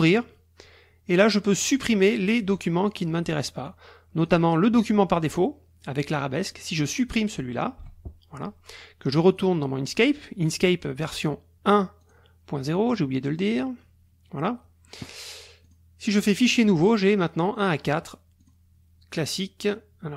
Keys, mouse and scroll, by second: 1.7 click, 2.8 click, 3.6 click, 4.2 click, 4.7 click, 6.5 click, 6.9 click, 7.8 Delete, 9.3 click, 11.0 click, 12.0 click, 12.9 click, 14.8 click, 15.6 click, 16.5 click, 18.4 click.